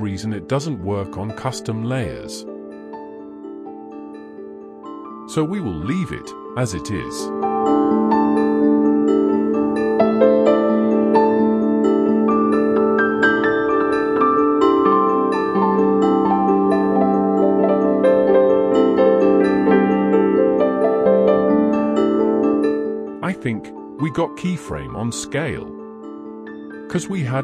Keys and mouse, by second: 2.7 click, 4.3 click, 10.1 click, 11.1 click, 12.4 click, 18.6-18.9 middle drag, 19.3 middle click, 19.7 KP_1, 21.7-22.2 shift+drag, 23.2 click, 26.2 click.